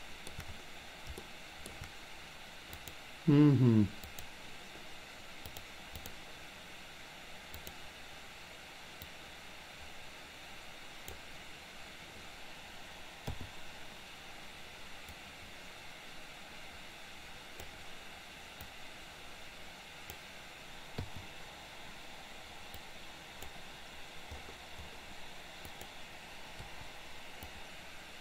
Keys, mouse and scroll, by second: 1.2-1.8 shift+middle drag, 2.8 click, 4.0 click, 5.7 click, 7.7 click, 9.0-11.3 drag, 15.3-17.8 drag, 18.7-20.2 drag, 21.2 i, 22.8 click, 25.8 click, 26.7 Delete, 27.5-28.2 drag.